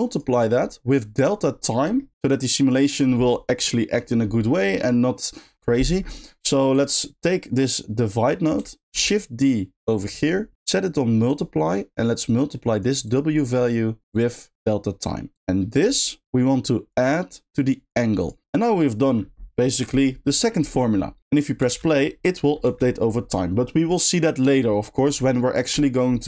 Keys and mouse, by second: 0.3 middle click, 2.0 middle click, 2.3 click, 2.9 click, 5.0 middle click, 6.7 click, 9.7 shift+drag, 10.5-11.4 shift+drag, 12.2 click, 13.0 click, 13.5 middle click, 14.1 click, 15.3 click, 17.0-18.0 drag, 18.2 click, 21.2 middle drag, 21.6 space, 25.5 middle click.